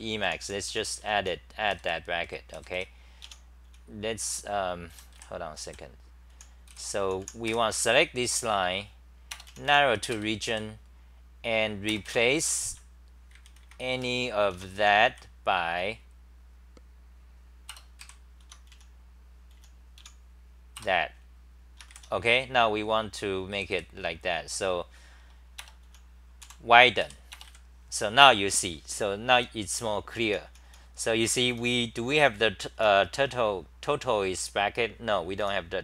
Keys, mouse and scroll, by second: 0.0-8.0 typing, 10.1 ctrl+g, 10.5 d, 14.5 Home, 14.8 h, 15.1 l, 17.7 Return, 18.0 Up, 18.4 Home, 18.7 n, 19.5 n, 20.0 o, 20.9 Return, 23.5 d, 27.0 3, 29.4-32.8 typing, 35.4 t.